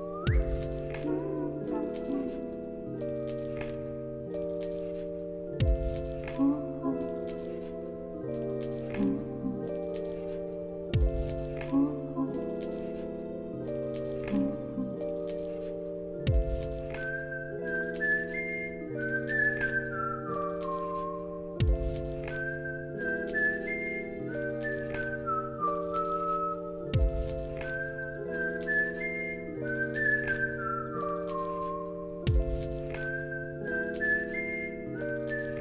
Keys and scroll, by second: 5.9 space, 28.2 ctrl+s.